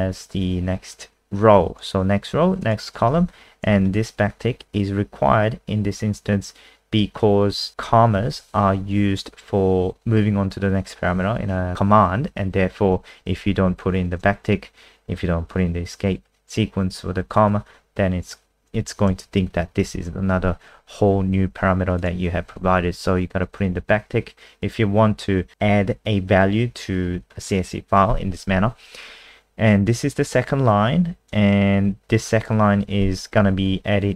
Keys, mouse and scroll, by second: 0.9 click, 3.4 Right, 7.8 Right, 13.4 Left, 14.2 BackSpace, 18.9 Right, 19.4 shift+Right, 19.6 shift+Right, 19.8 shift+Right, 19.9 shift+Right, 22.0 click, 22.5 ctrl+z, 23.8 Right, 29.8 click.